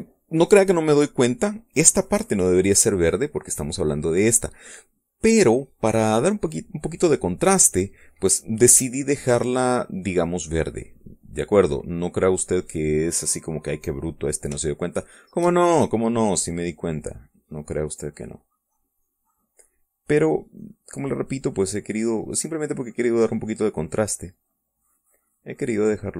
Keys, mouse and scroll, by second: 2.3 click, 6.0-8.0 drag, 9.1 click, 10.0 middle click, 11.3 click, 12.3-13.6 drag, 13.9 middle click, 15.2 shift+click, 16.6-21.8 drag, 21.9 click, 22.7 click, 23.9 click, 24.7-26.1 drag.